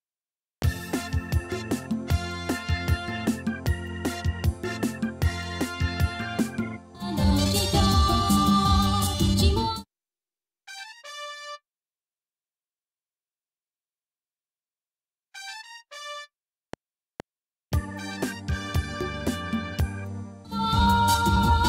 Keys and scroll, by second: 0.0 Left, 0.5 space, 1.2 F7, 6.7 space, 9.5 space, 16.6 F7, 20.2 space.